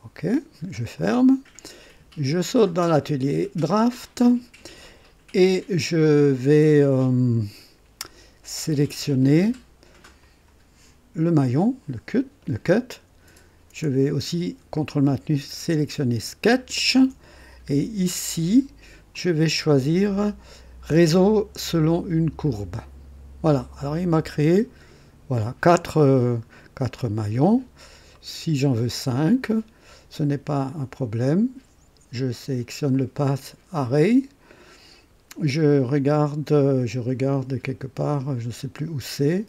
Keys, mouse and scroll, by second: 0.9 click, 4.0 click, 10.2 click, 16.6 ctrl+click, 19.1 click, 22.4 click, 23.8-24.3 scroll down 1, 24.5 right click, 26.5-27.2 scroll up 2, 28.1 right click, 32.9 click, 37.5 scroll down 1, 38.2 scroll down 1.